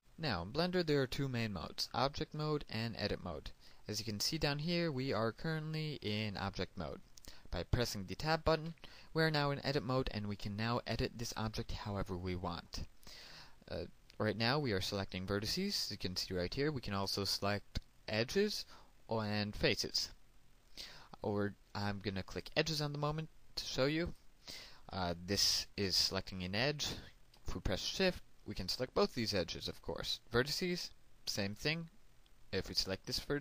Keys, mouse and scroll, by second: 9.8 Tab, 23.6 click, 25.2 right click, 29.1 shift+right click, 31.7 click, 32.7 right click.